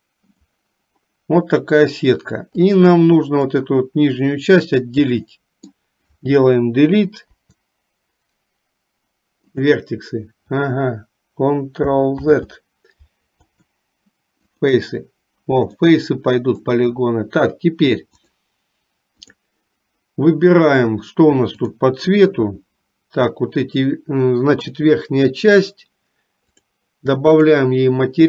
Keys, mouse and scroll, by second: 0.6 click, 2.9 click, 4.7-5.8 middle drag, 7.3 Delete, 12.4 ctrl+z, 13.5 Delete, 15.8 middle click, 18.2-19.7 drag, 22.1 click, 26.6 click, 27.4 click.